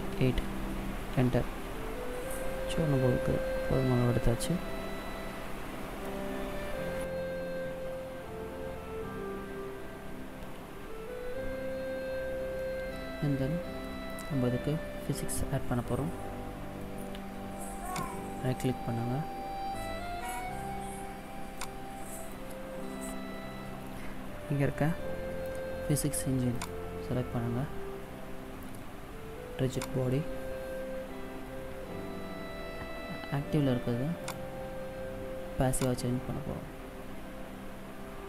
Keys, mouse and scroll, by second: 2.2 middle click, 10.3 middle click, 12.4 middle click, 15.6 middle click, 17.7 right click, 21.4 click, 26.4 click, 29.7 click, 34.1 click.